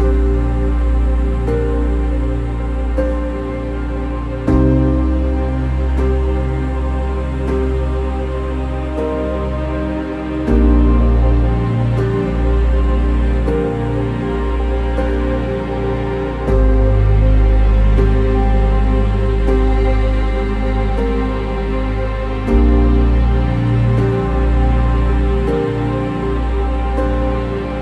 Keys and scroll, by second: 20.5 ctrl+-, 20.9 ctrl+-, 21.1 ctrl+-, 21.5 ctrl+-.